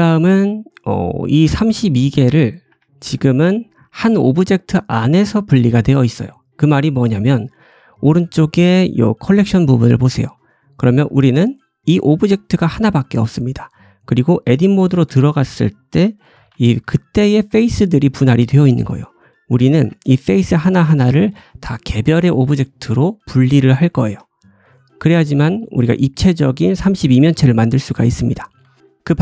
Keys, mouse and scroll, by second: 0.0-5.6 drag, 1.3 middle click, 1.3 right click, 2.6 Tab, 3.2 shift+middle click, 3.5 middle click, 3.9 Tab, 4.1-4.4 scroll up 2, 5.6-6.3 scroll up 1, 6.9 middle click, 8.6 click, 11.0 click, 14.4 Tab, 14.8 shift+middle click, 16.2 l, 16.7 g, 17.6 ctrl+z.